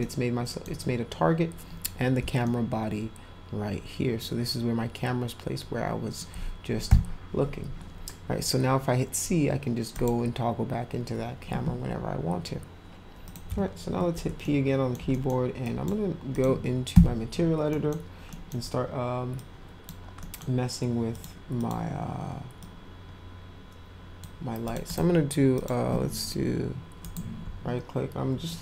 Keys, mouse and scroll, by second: 0.0-0.6 middle drag, 2.4-6.2 alt+middle drag, 9.9 click, 13.2 click, 13.4 p, 14.4 alt+middle click, 15.1 middle drag, 15.6 drag, 16.3 click, 17.7 middle click, 18.3 middle drag, 19.3 click, 20.2 middle drag, 21.1 click, 21.5 click, 22.6-24.2 drag, 24.6 click, 24.8 right click, 25.5 click.